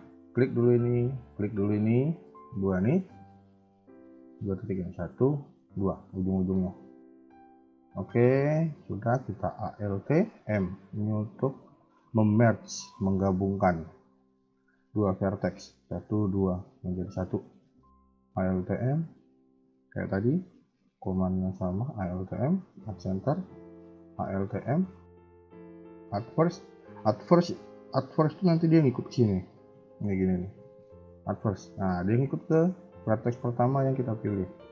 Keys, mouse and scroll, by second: 0.1 click, 1.2 shift+click, 4.3 a, 4.5 a, 4.7 click, 5.4 shift+click, 6.2 shift+middle click, 6.6 middle click, 7.5 scroll up 2, 8.1-8.5 scroll down 2, 10.2 alt+m, 13.6 KP_1, 13.8 KP_3, 14.2 middle click, 14.6-15.3 scroll up 1, 15.3 click, 16.1 shift+click, 18.2 alt+m, 19.8 shift+middle click, 20.5 click, 21.1 shift+click, 22.3 alt+m, 23.4 a, 23.5 a, 23.7 click, 24.2 click, 24.6 shift+middle click, 24.8-25.9 shift+scroll up 2, 26.1 alt+m, 30.3 alt+m, 34.1 ctrl+z.